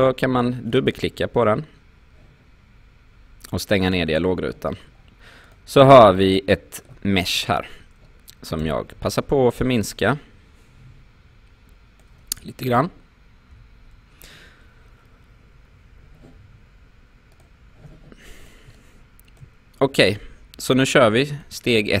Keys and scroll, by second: 8.6 r, 13.5 f.